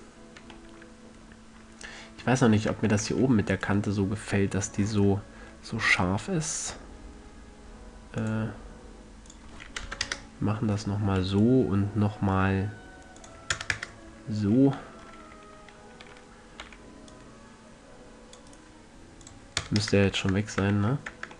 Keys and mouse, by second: 3.1 Tab, 8.5-11.7 drag, 11.7-14.1 right drag, 13.5 click, 15.6 a, 17.0 c, 18.9-19.6 drag, 19.6 middle click, 20.5 Tab, 20.9 a.